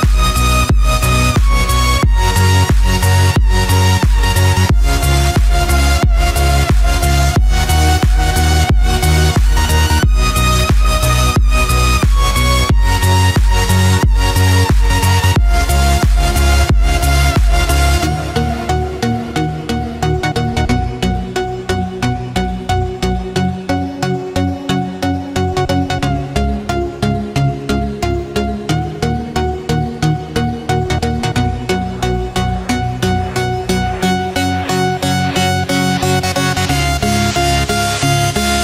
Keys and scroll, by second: 0.5 ctrl+z, 7.6 ctrl+z, 31.7 ctrl+-, 33.8 ctrl+z, 36.2 ctrl+=, 38.4 ctrl+-.